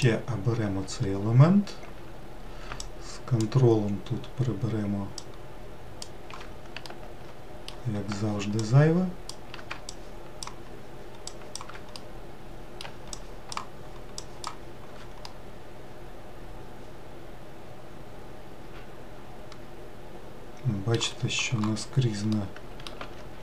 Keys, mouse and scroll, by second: 0.6 alt+click, 3.5 ctrl+click, 5.9 ctrl+click, 7.5 alt+middle click, 9.3-10.6 alt+drag, 11.9 ctrl+click, 12.6-13.8 middle drag, 13.8 ctrl+click, 14.9 ctrl+click, 15.9-19.0 middle drag, 23.1 middle click.